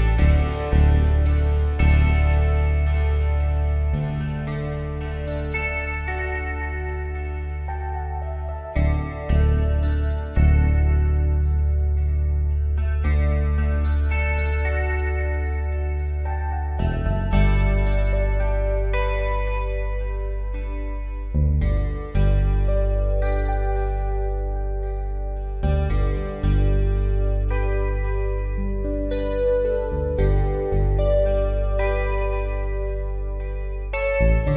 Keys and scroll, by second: 4.0 Delete, 15.0 ctrl+z, 25.7-29.2 typing.